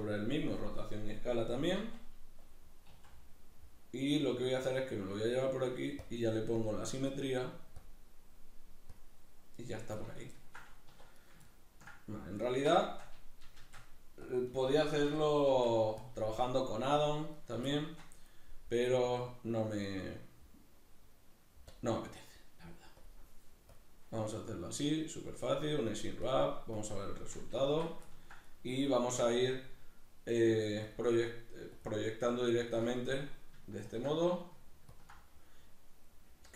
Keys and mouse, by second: 3.0 s, 5.2 click, 10.3-14.5 ctrl+middle drag, 10.9 1, 13.5 shift+d, 14.3 click, 14.5 right click, 14.6-17.4 middle drag, 15.1 l, 17.4 right click, 17.5-19.1 shift+middle drag, 19.1-27.7 drag, 27.7 Tab, 28.1 ctrl+middle click, 28.5 right click, 30.9-33.0 ctrl+drag, 33.0 middle click, 33.9 ctrl+click, 34.2 middle click, 35.0 ctrl+click, 35.3-36.5 middle drag.